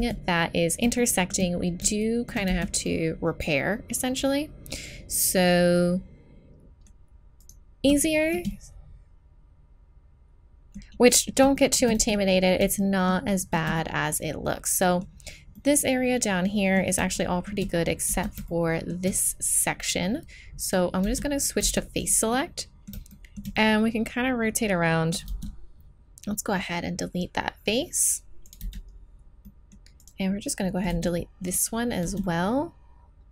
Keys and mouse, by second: 0.0 z, 2.2 middle click, 2.5 z, 4.5 middle click, 7.4 right click, 7.8-9.3 middle drag, 12.0 z, 15.0 middle click, 17.8 middle click, 18.1 z, 20.7-21.8 drag, 21.0 z, 21.6 z, 22.0 middle click, 24.7 middle click, 25.3 x, 28.6 z, 28.9 middle click, 29.2 middle click, 30.9 x, 32.0 z.